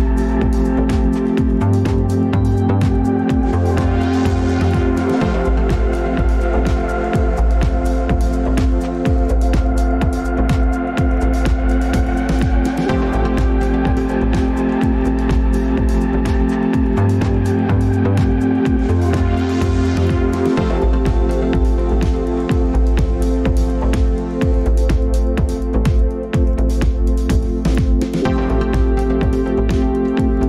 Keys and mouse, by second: 7.4-7.7 drag, 16.9 click, 28.9 drag.